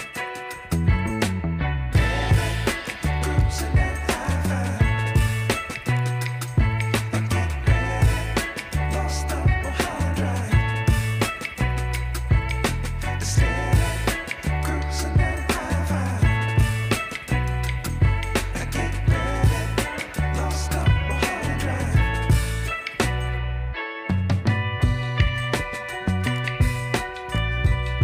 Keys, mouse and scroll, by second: 7.9-16.6 drag, 16.6 ctrl+=, 18.4 space, 18.8 click, 18.9 click, 19.0 space, 20.7-26.2 drag.